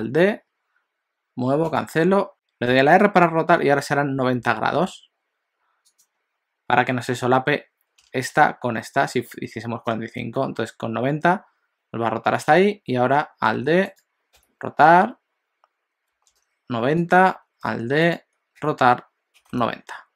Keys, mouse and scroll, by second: 2.3 r, 13.6 alt+d, 14.4 r, 17.8 alt+d, 18.6 r.